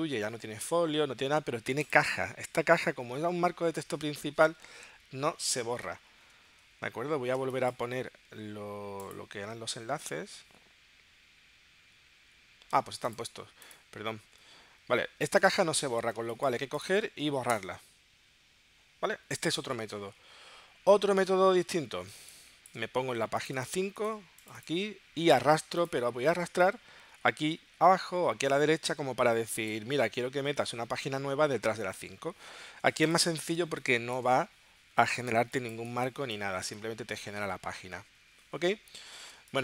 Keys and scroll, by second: 7.4 space, 17.5 BackSpace, 20.0 super+z, 22.2 space, 33.6 space, 39.4 space.